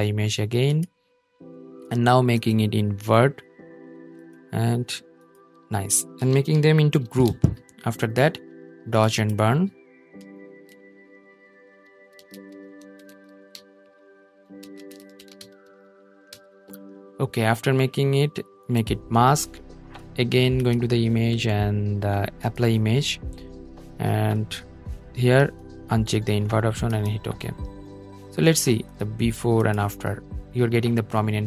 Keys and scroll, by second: 6.1 super+g.